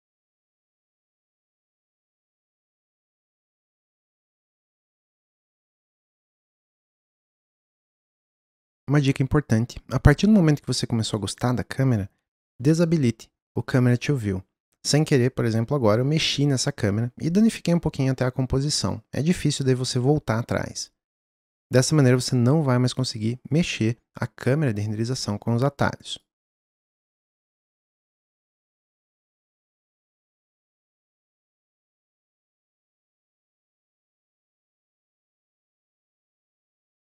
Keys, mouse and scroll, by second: 0.7-2.9 middle drag, 7.9 click, 12.4 n, 13.7-26.2 drag, 27.3 n, 28.0 drag, 28.3 g, 29.0 click, 29.5 click, 29.6 g, 30.2 click, 31.3 click, 31.6 g, 32.5 s, 33.6 click, 33.9 s, 34.8 click, 35.3 click, 36.4 click, 36.9 g.